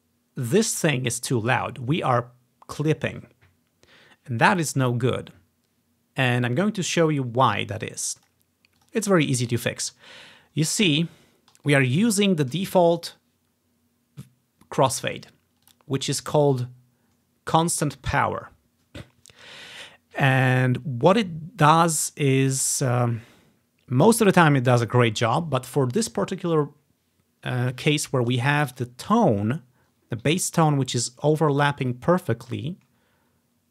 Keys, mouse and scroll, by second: 8.3-10.0 drag, 10.7-11.8 scroll up 1, 11.8 click, 12.0 click, 15.7 click, 16.1 click, 28.8 click, 29.3-29.7 scroll up 1, 29.9 scroll down 2, 32.1 scroll down 2, 33.1 scroll up 2, 33.4-33.7 scroll down 2.